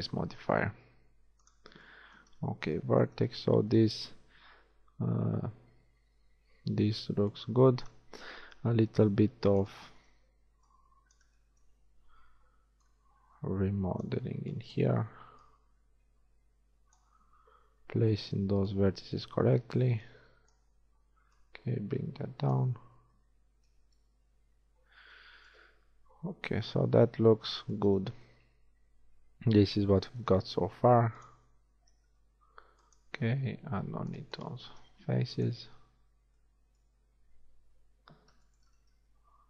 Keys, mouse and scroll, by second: 0.6 ctrl+Tab, 7.8 middle click, 9.0 shift+a, 9.3 b, 10.0 a, 10.4 b, 14.3 a, 14.4 b, 15.4-17.2 drag, 17.4 a, 18.0 b, 19.9 b, 22.6 click, 22.8 a, 28.0 z, 30.7 ctrl+Tab, 32.1 ctrl+Tab, 34.9 x, 36.1 z, 36.9 z, 37.8 KP_1, 39.0 ctrl+Tab.